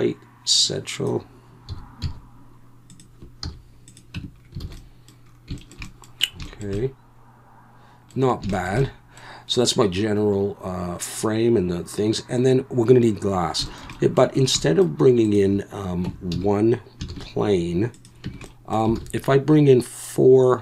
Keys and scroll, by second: 1.7 s, 2.1 z, 3.4 z, 4.1 Tab, 4.6 alt+a, 16.0 Tab, 16.3 a, 17.1 shift+s, 18.2 Tab, 19.0 alt+a.